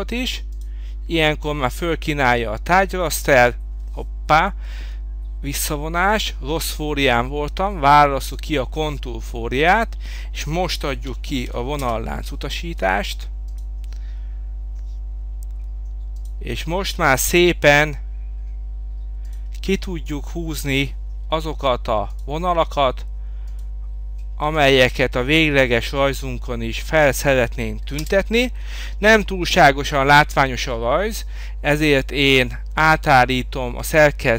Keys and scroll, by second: 4.8 Escape, 11.0 v, 11.9 Return, 28.0 Return, 28.6 Escape.